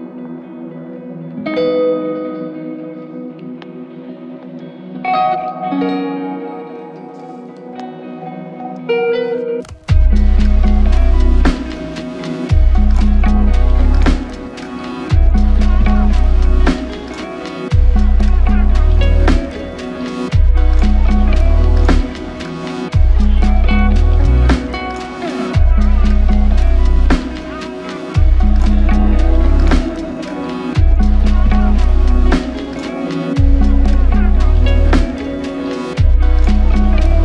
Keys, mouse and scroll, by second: 0.4 shift+click, 1.3 alt+click, 2.0 shift+click, 6.7 alt+click, 7.3 shift+click, 8.5 alt+click, 11.5 double click, 14.9 alt+click, 19.0 f, 19.1 double click, 21.3 f, 26.7 alt+shift+click, 29.3 f, 29.5 double click, 35.4 f, 36.1 shift+click.